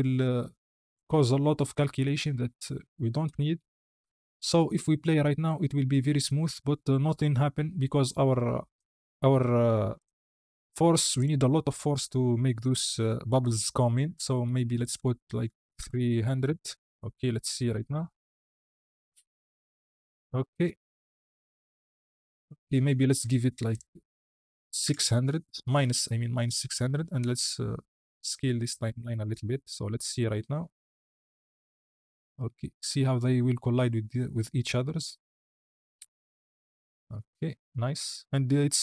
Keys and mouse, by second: 0.1-0.8 drag, 1.9-2.2 drag, 3.5 KP_1, 5.0 space, 7.7 space, 8.5 click, 9.9 click, 11.0-16.4 drag, 15.8 KP_0, 17.5 click, 17.8 space, 22.2 space, 22.5-22.8 drag, 23.7-25.4 drag, 24.9 KP_0, 27.1-29.0 drag, 30.1 space, 31.8 click.